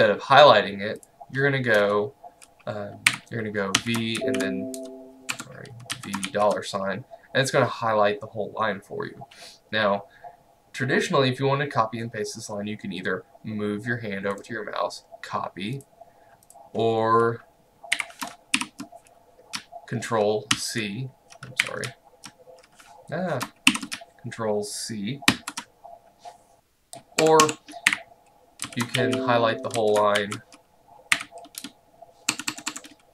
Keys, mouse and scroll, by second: 3.1-4.7 typing, 5.4 Escape, 6.0 v, 6.3 shift+4, 14.4 right click, 15.8 click, 18.0 0, 18.6 shift+End, 20.6 ctrl+v, 21.7 0, 23.8 shift+End, 25.4 ctrl+c, 27.3 Escape, 27.9-31.7 typing, 32.3 Escape.